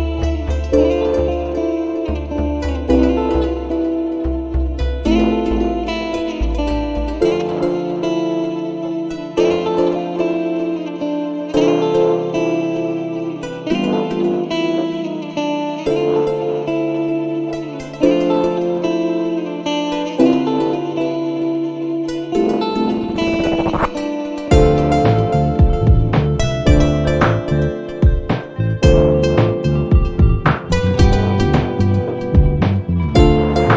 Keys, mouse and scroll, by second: 0.1 click, 2.5 shift+9, 3.8 1, 5.4 shift+=, 7.5 click, 9.4 shift+0, 11.9 Return, 13.3 click, 15.0-15.7 scroll up 2, 15.9-16.3 scroll down 2, 16.4-16.9 scroll down 2, 18.1 click, 19.1-20.4 drag, 21.7 ctrl+c, 23.3 click, 23.7 click, 25.7 ctrl+v, 28.0 click, 28.8 click, 30.1 BackSpace, 30.3 2, 30.7 0, 33.4 click.